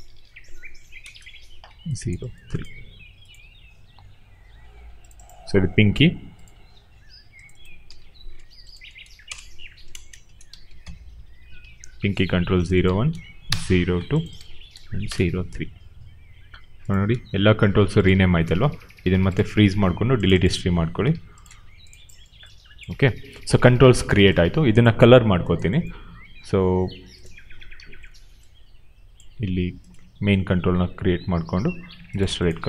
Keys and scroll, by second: 0.7 3, 0.9 Return, 5.7 ctrl+c, 7.7 ctrl+v, 8.8 BackSpace, 9.9-11.2 typing, 11.5 ctrl+a, 12.3 ctrl+c, 13.0 ctrl+v, 13.4 Return, 14.6 ctrl+v, 15.0 Return.